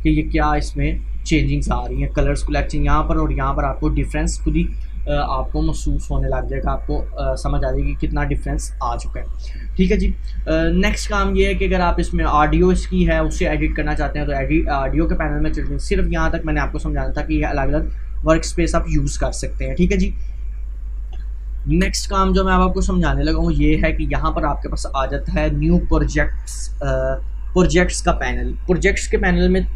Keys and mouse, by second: 5.8-14.8 drag, 16.0 click, 19.3-21.6 drag, 21.6 Delete, 22.5 click, 22.7 Delete.